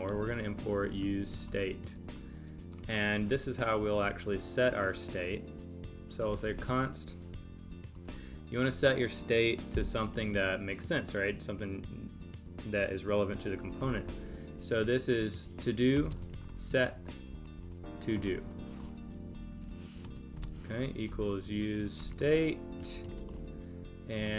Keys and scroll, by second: 6.6 space, 16.1 space, 19.3 super+Right, 20.0 space.